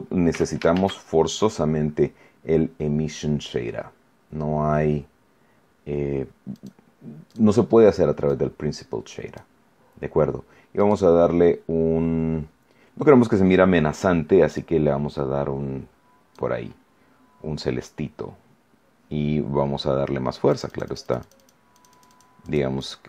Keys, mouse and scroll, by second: 0.3 x, 0.7 shift+a, 6.5 click, 7.2 click, 8.2-9.5 drag, 10.7 click, 14.5-16.5 drag, 20.5-21.6 drag, 21.7 click.